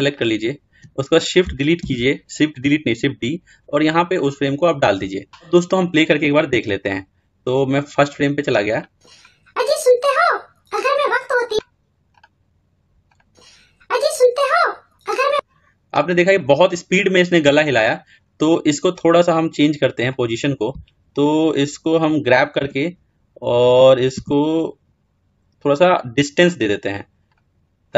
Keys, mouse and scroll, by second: 1.7 shift+d, 6.7-17.9 drag, 22.4 g.